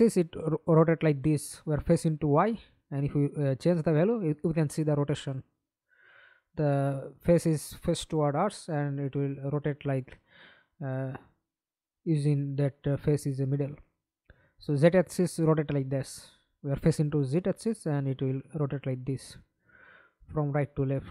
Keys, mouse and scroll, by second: 0.5 alt+click, 6.7 alt+click, 8.0 alt+click, 11.9-12.8 scroll up 15, 16.9 alt+click.